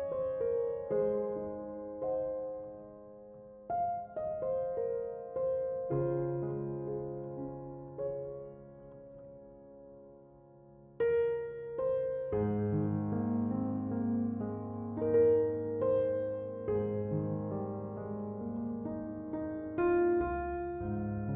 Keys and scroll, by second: 13.1 Escape.